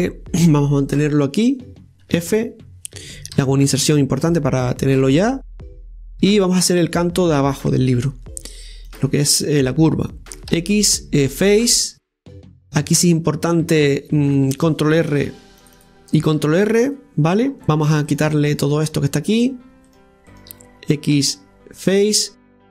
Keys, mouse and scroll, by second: 8.9 click, 9.4 right click, 10.5 x, 12.4-15.3 shift+middle drag, 15.3 ctrl+r, 17.4 scroll down 2, 17.6 click, 18.1 right click, 21.1 x.